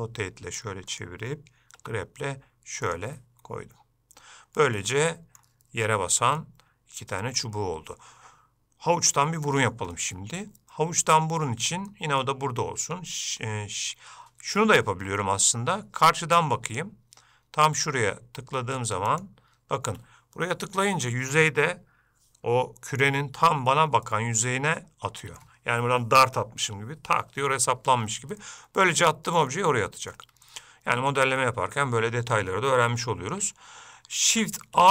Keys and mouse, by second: 4.9 middle click, 6.6-7.6 middle drag, 10.1-11.4 middle drag, 12.1 middle click, 16.9 click, 19.3 shift+right click, 24.2-25.6 middle drag, 28.6 middle click, 29.7 ctrl+middle click, 30.7 shift+middle click, 31.6 middle click.